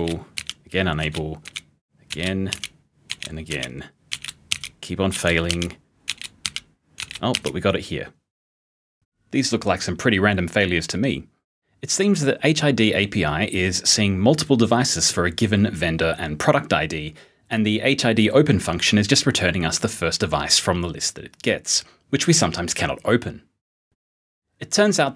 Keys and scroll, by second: 0.0-6.9 typing.